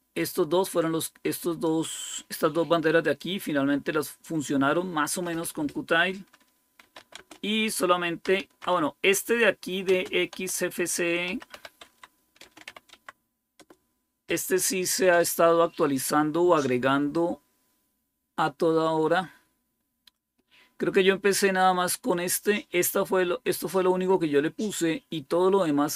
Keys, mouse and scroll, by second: 1.5 click, 3.1-5.5 drag, 6.7 typing, 8.1-13.4 typing, 17.0-20.0 drag.